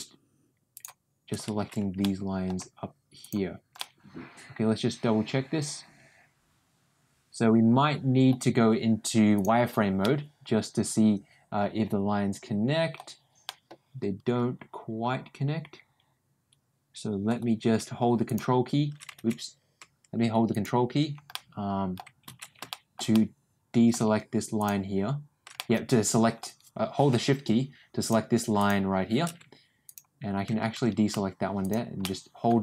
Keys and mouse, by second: 0.6 shift+click, 1.9 ctrl+middle click, 3.7-8.2 ctrl+middle drag, 9.3 click, 9.9-12.9 middle drag, 13.4-17.2 middle drag, 20.4 ctrl+click, 21.2 middle click, 22.6 ctrl+shift+middle click, 23.0 ctrl+middle click, 25.5 middle click, 31.5 shift+click, 31.9 shift+middle click, 32.5-32.6 middle drag.